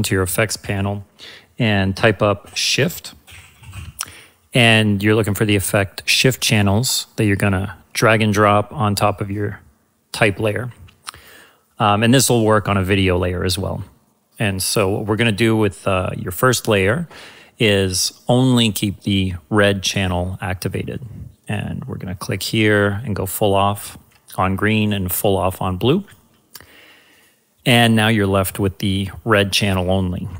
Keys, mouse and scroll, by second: 2.4 ctrl+s, 3.2 ctrl+h, 3.5 ctrl+f, 3.7 ctrl+t, 6.8-10.4 ctrl+drag, 18.3 ctrl+click, 21.4-29.2 ctrl+drag.